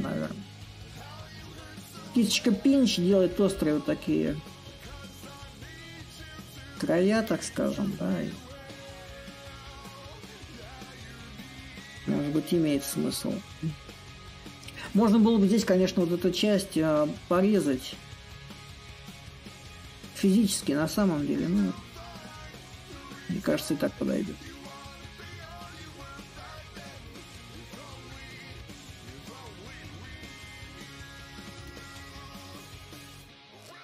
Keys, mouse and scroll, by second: 4.6-7.1 alt+drag, 7.2-9.6 ctrl+drag, 9.8-18.7 shift+drag, 19.1-24.2 drag, 24.2-29.3 drag, 31.3-33.8 ctrl+drag.